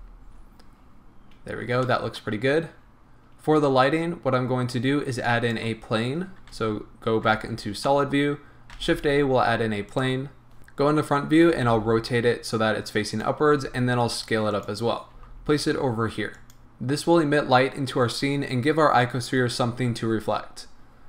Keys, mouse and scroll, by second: 0.8-1.9 scroll down 2, 1.9-5.2 middle drag, 2.3-5.2 scroll down 2, 5.2-7.9 drag, 6.5 z, 7.6 scroll down 2, 7.9-8.7 middle drag, 8.7 shift+a, 10.6 KP_1, 11.5 r, 13.2 click, 13.6 s, 14.6 click, 15.1 g, 16.5 click.